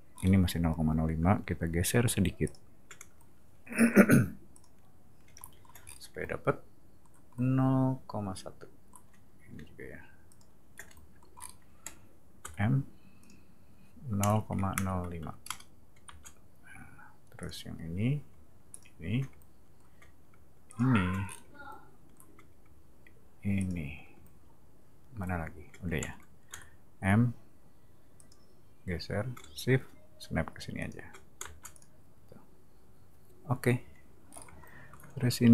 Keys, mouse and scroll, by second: 0.1 middle click, 2.4 shift+click, 4.5 shift+click, 5.8 scroll up 2, 10.3 shift+click, 11.3 middle click, 12.4 m, 13.2 click, 16.0 space, 17.4 click, 18.7 shift+click, 20.7 shift+click, 21.2 scroll down 2, 23.6 shift+click, 26.5 m, 28.1 click, 30.8 shift+click, 31.4 space, 31.7 click, 34.2 middle click, 35.1 r.